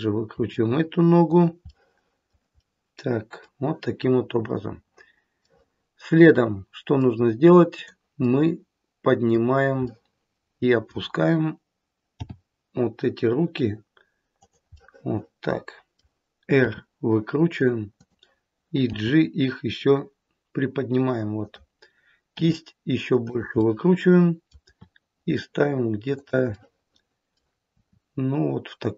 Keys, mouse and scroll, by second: 0.2 r, 1.6 middle click, 2.5 middle click, 5.4 middle click, 5.8 middle click, 7.7 click, 8.4 middle click, 9.8 middle click, 12.0 g, 14.7 middle click, 16.6 r, 18.9 g, 22.3 r, 23.5 middle click, 24.6 r, 26.4 middle click, 27.7 r.